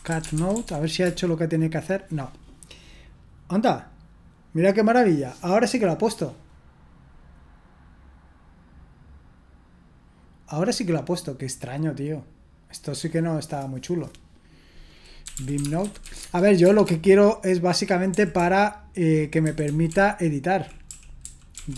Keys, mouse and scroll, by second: 0.0-1.5 typing, 15.0-16.5 typing, 16.6 Return, 18.4-21.7 typing.